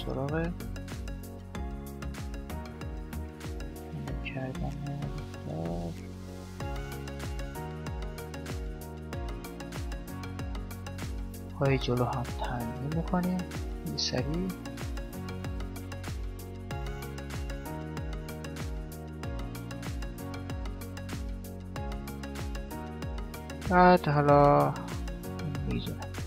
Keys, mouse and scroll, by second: 0.2 right click, 1.6 g, 3.1-5.3 middle drag, 5.3 right click, 7.7 KP_7, 8.3 click, 8.3 middle click, 8.7 right click, 8.7 middle click, 8.9 right click, 9.3 shift+d, 9.7 r, 10.3 g, 10.6-12.1 middle drag, 10.8-11.9 drag, 10.9 g, 12.1 right click, 12.1 g, 12.6 right click, 12.9 g, 14.5 right click, 14.7 g, 15.7 click, 15.8 middle click, 16.0 click, 16.0-20.6 typing, 16.4 right click, 17.1 click, 17.2 middle click, 17.7 click, 18.0 right click, 18.4 middle click, 19.0 right click, 19.4 click, 19.7 right click, 19.9 right click, 20.2 right click, 20.3 middle click, 20.7 right click, 21.0 right click, 21.1 click, 21.3-25.6 middle drag, 23.3-25.0 drag, 25.0 right click.